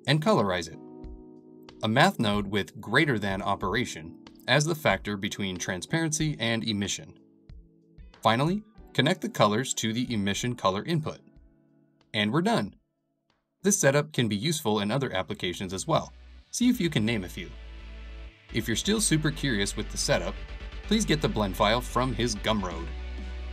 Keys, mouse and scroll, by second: 1.6-2.7 middle drag, 2.7-3.5 scroll down 2, 3.5 middle click, 4.0-4.4 scroll up 3, 4.4-7.9 shift+middle drag, 7.9 s, 10.5 shift+middle click, 10.8 g, 12.9 click, 13.2-16.1 middle drag, 16.1 click, 17.3 s, 17.5 g, 19.7 click, 20.4-23.5 middle drag.